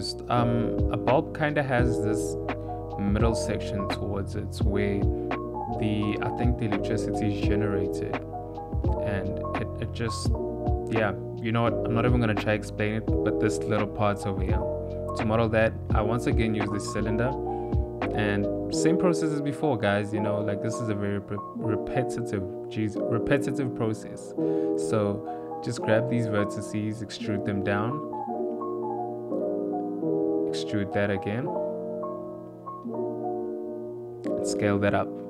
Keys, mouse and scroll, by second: 0.5 e, 3.3 Tab, 3.7 click, 3.7 right click, 3.7 shift+middle click, 4.2 click, 5.1 click, 5.4 click, 5.7 h, 6.8 ctrl+z, 7.8 click, 8.9 click, 9.5 h, 10.0 click, 11.7 click, 12.6 s, 13.7 g, 15.1 s, 16.7 Tab, 17.6 click, 18.5 g, 20.4 click, 21.3 s, 23.0 g, 24.3 s, 25.6 click, 26.3 e, 32.5 e, 33.8 s.